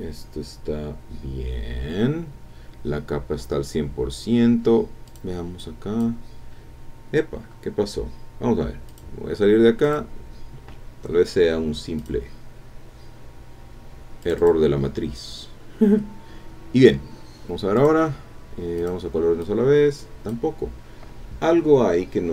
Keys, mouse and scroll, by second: 5.1 click, 5.6 click, 8.9 click, 9.8 click, 12.0 click, 12.9 scroll down 1, 14.2 click, 17.7 click, 18.8 click, 19.4 click.